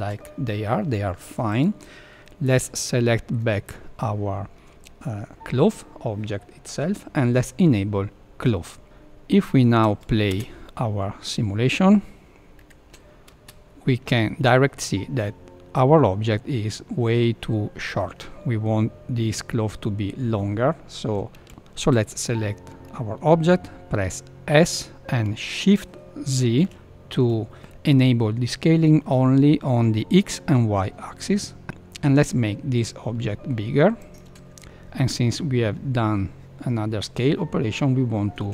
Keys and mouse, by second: 1.4 click, 2.2-3.3 middle drag, 8.5 click, 8.8 middle click, 10.3 space, 12.6 KP_1, 13.3 space, 24.5 s.